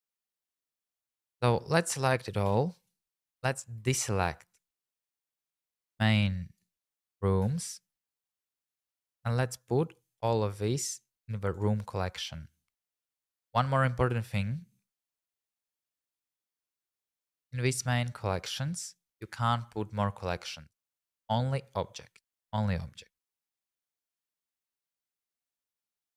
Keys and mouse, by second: 2.5 a, 3.3 shift+z, 8.6 shift+z, 8.9 click, 10.2 m, 18.4 click, 24.0 click, 24.3 shift+click, 24.7 x, 26.0 click.